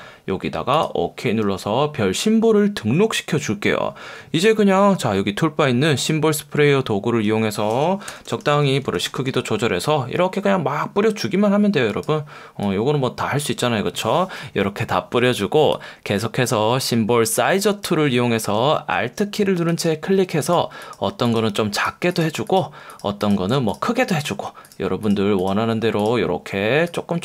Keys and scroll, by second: 1.4 F1, 4.0 F1, 7.3 F1, 8.1 [, 8.9 ], 9.1 [, 9.3 ].